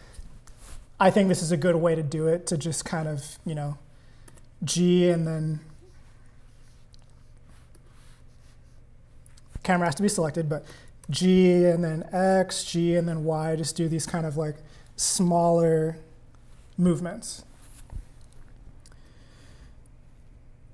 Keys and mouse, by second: 4.3 g, 4.7 x, 7.7 g, 9.7 click, 11.0 g.